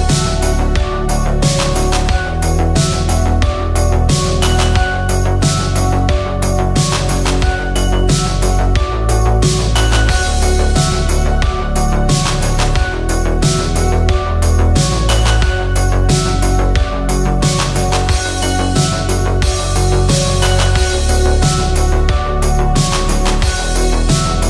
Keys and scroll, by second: 16.5 ctrl+a, 18.7 ctrl+d, 20.1 ctrl+t, 22.2 ctrl+z.